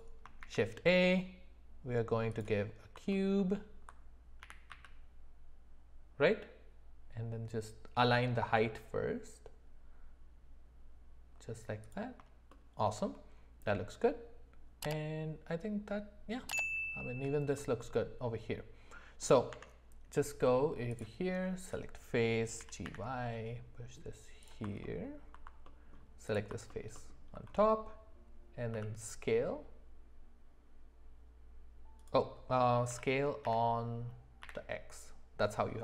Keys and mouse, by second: 0.4 shift+a, 3.1 middle click, 3.4 middle click, 4.4 g, 12.5 shift+middle click, 13.7-16.5 middle drag, 17.6-19.2 middle drag, 19.5 Tab, 21.0 click, 22.6 g, 24.8 alt+middle click, 25.6 middle click, 26.7 alt+middle click, 26.9 alt+middle click, 28.7 s, 32.9 s.